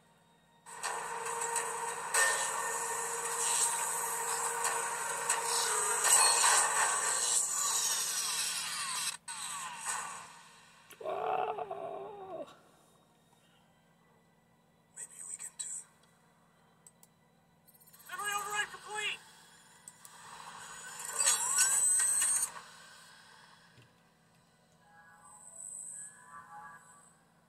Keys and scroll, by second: 24.3 super+9.